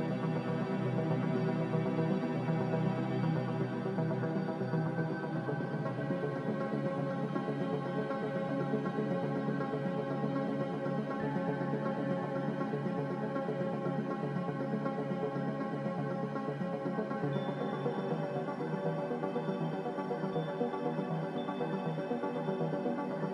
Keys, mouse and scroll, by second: 11.0 Delete.